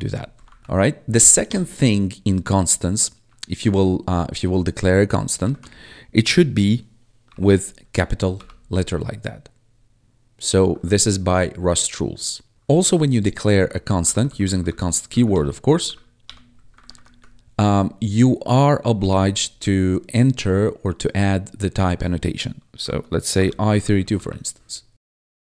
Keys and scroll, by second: 0.5 ctrl+shift+Left, 0.6 ctrl+s, 1.1 Right, 1.4 BackSpace, 5.3 shift+Right, 7.2 shift+y, 8.2 ctrl+s, 10.4 Left, 10.7 Right, 13.5 Down, 15.2 Return, 15.6 Up, 16.1 Return, 16.7 ctrl+Right, 19.0 shift+;, 22.8-24.4 typing.